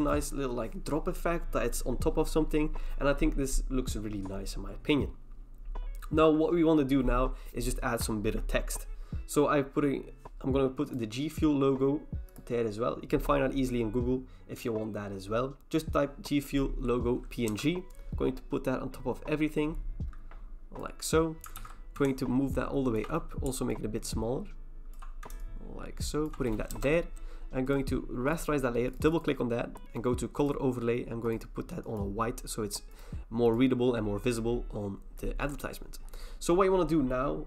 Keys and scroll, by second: 17.5 Return, 21.6 ctrl+t, 26.7 Return.